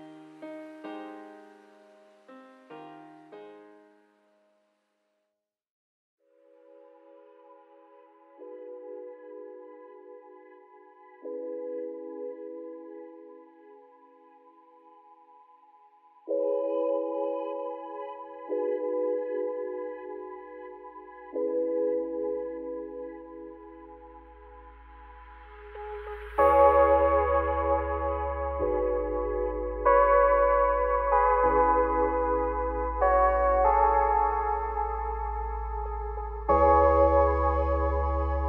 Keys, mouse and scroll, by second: 0.9 ctrl+1, 1.6 scroll down 1, 1.8-3.5 middle drag, 3.5-3.9 drag, 3.9-4.3 scroll down 5, 4.3 `, 5.2-6.7 right drag, 6.7 click, 7.4-8.4 drag, 8.6-9.9 scroll down 20, 9.9 shift+middle click, 10.2-10.8 scroll up 2, 10.8 click, 10.9 Tab, 11.0-11.4 scroll up 4, 11.4 shift+middle click, 12.1-14.1 scroll down 2, 14.3 ctrl+r, 16.0-16.4 scroll up 3, 16.4 shift+middle click, 16.7-17.8 scroll up 4, 17.8 shift+d, 19.4 p, 19.9 scroll up 2, 20.0 Tab, 20.5 click, 21.2 Tab, 21.5 a, 21.9-22.3 scroll down 4, 22.3 e, 24.7 scroll up 2, 24.9 a, 25.3 g, 26.4 alt+e, 30.3 `, 30.8-31.3 scroll down 9, 31.3 middle click, 31.6 a, 32.0 s, 32.8 middle click, 33.5 scroll up 3, 33.7 z, 34.2 middle click, 34.7 `, 35.4-36.1 scroll up 3, 36.1 click, 36.7 click, 37.5-38.4 shift+drag.